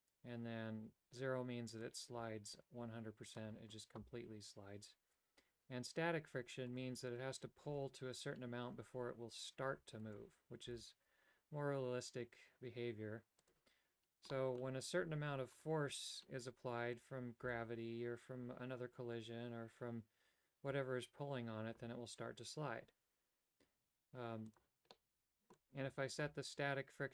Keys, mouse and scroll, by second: 2.1-3.6 drag, 6.9 right click, 7.9 Tab, 10.2 right click, 10.9 g, 14.4 middle click, 15.7 right click, 17.7 g, 25.0 middle click.